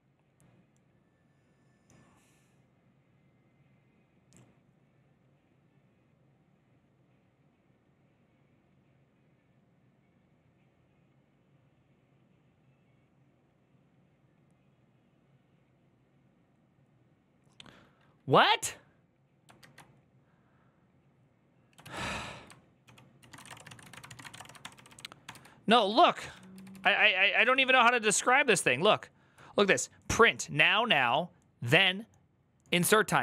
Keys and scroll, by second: 21.6 alt++, 21.6 alt+{, 22.6 ctrl+w, 22.9-24.6 typing, 25.0 ctrl+d, 25.1 ctrl+u, 25.6 ctrl+u, 27.8 ctrl+d, 27.8-29.5 typing.